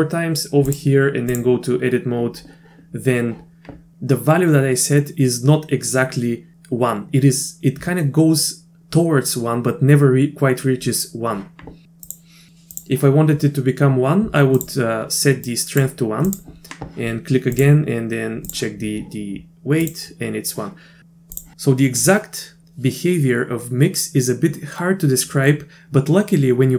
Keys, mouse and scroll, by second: 0.8 click, 12.2 click, 14.6 click, 15.5 click, 16.3 click, 17.7-18.5 drag, 19.8 click, 21.0 click.